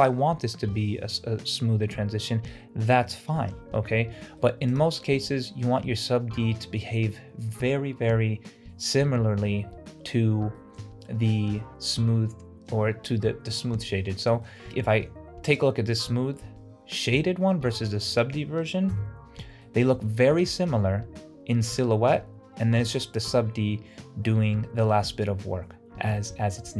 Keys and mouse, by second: 4.2 middle drag, 4.8 click, 5.3-5.9 middle drag, 10.6 shift+middle drag, 14.2-14.5 shift+middle drag, 19.0 KP_Decimal, 19.7-20.1 middle drag, 20.6 middle click.